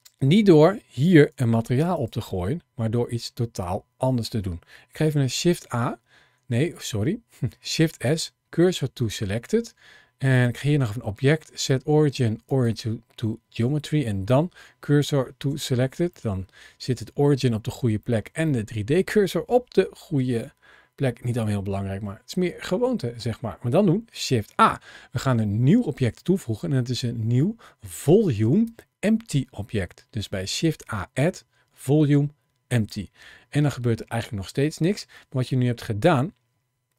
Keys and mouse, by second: 1.1 g, 1.8 click, 4.8 shift+a, 7.5 shift+s, 10.2-12.5 drag, 13.5 shift+s, 15.9-17.1 middle drag, 17.9 shift+middle click, 18.4-21.7 middle drag, 23.9 shift+a.